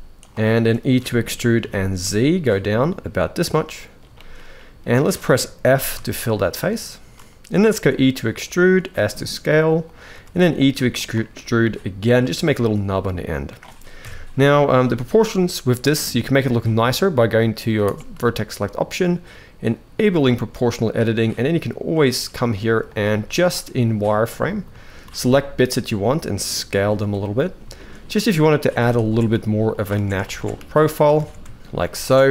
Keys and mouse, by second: 0.2 shift+middle click, 0.7 e, 3.3 middle click, 3.9 shift+middle click, 4.3 middle click, 5.4 f, 5.8 shift+middle click, 6.9 middle click, 7.5 e, 8.7 s, 9.9 e, 11.4 middle click, 12.2 shift+middle click, 13.8 KP_1, 18.0 shift+middle click, 20.0 shift+middle click, 20.8 click, 22.0 s, 22.9 z, 23.6 click, 24.4 s, 27.6 middle click, 28.4 alt+a, 28.7 alt+shift+click, 29.1 s, 29.8 alt+a, 30.3 s, 31.0 alt+a, 31.4 alt+shift+click, 31.7 alt+a, 31.7 alt+shift+click, 31.7 z, 32.0 s.